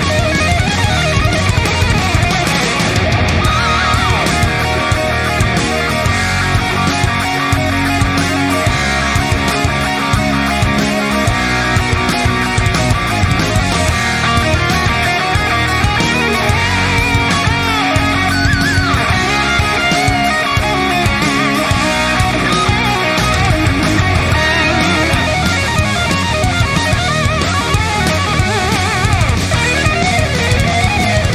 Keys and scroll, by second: 5.0 ctrl+d, 8.8 alt+BackSpace, 10.3 ctrl+d, 20.0 ctrl+t, 30.3 Return.